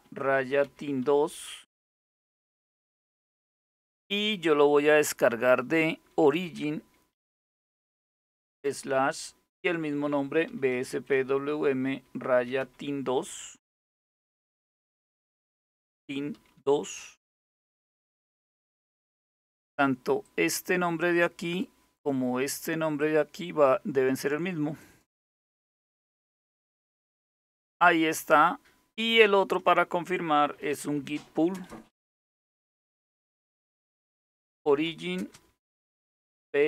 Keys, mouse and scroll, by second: 0.0-2.1 typing, 3.3 typing, 5.9-7.0 typing, 8.3 typing, 9.7-12.2 typing, 13.6 typing, 15.2-16.6 typing, 19.9 click, 22.6 click, 25.9 Return, 30.0-36.6 typing.